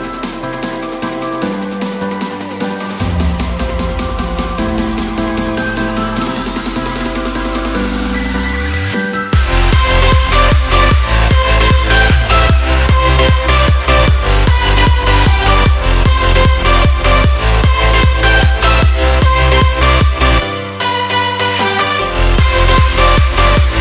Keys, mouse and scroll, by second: 0.0-6.8 drag, 6.8 Delete, 9.7-21.1 drag, 22.1-23.8 drag.